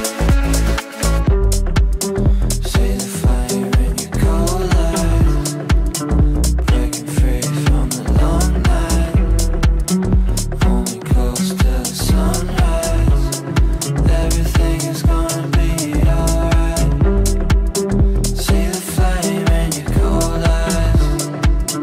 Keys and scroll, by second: 6.5 Delete, 9.5 shift+F2, 9.8 F3, 13.0 shift+Page_Down, 15.3 shift+F2, 15.7 Escape, 16.2 g.